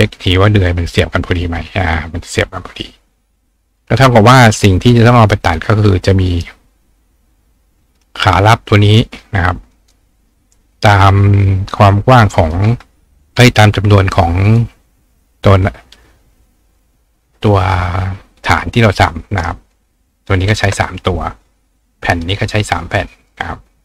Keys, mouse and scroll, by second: 0.1 click, 2.4 click, 3.7 click, 4.0 right click, 5.0 click, 6.3 right click, 7.9 click, 9.0 click, 9.7 right click, 11.0 click, 11.7 click, 14.5 click, 18.6 ctrl+click, 19.3 ctrl+right click, 21.1-22.2 drag, 23.1 click, 23.7-23.8 drag.